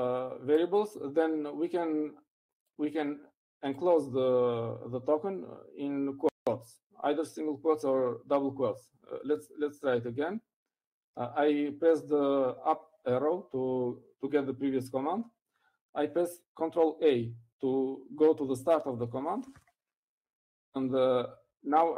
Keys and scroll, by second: 11.2 Up, 21.2 ctrl+a.